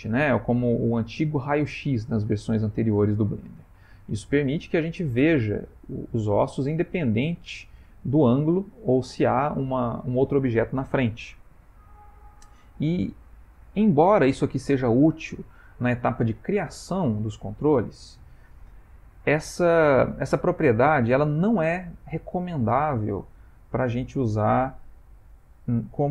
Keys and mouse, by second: 1.6 middle click, 3.9 middle click, 12.2 click, 13.2 click, 21.4 middle click.